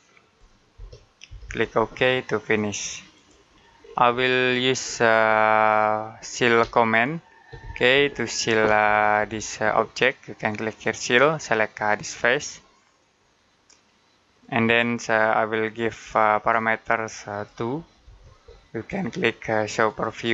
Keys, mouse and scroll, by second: 0.6-1.3 typing, 2.4 click, 3.7 scroll down 1, 3.9-5.2 scroll up 1, 5.4 middle click, 6.6 shift+middle click, 7.6 middle click, 8.6-9.2 scroll down 1, 12.4 middle click, 14.2 click, 17.9 2.